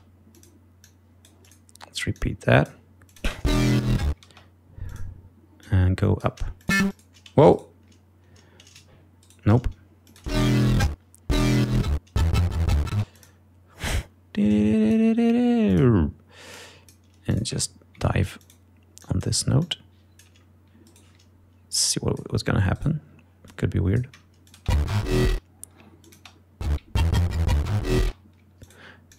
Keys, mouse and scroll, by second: 0.0 space, 0.5 click, 1.0 click, 2.3 click, 3.2 click, 3.4 space, 3.8 ctrl+scroll down 2, 4.1 ctrl+scroll up 2, 4.4 ctrl+space, 5.0 click, 5.8 click, 6.7 click, 7.7 shift+right click, 9.4 shift+right click, 10.2 click, 10.4 space, 13.1 space, 13.3 click, 14.0-15.3 drag, 15.8 click, 17.8 ctrl+scroll up 2, 20.4 click, 21.0 shift+right click, 22.0 click, 22.9 shift+right click, 23.6 shift+click, 24.8 click, 24.8 space, 25.4 ctrl+space, 25.5 ctrl+scroll down 2, 26.2 ctrl+click, 26.3 ctrl+space, 28.1 space, 28.3 ctrl+scroll up 2, 28.8 ctrl+click.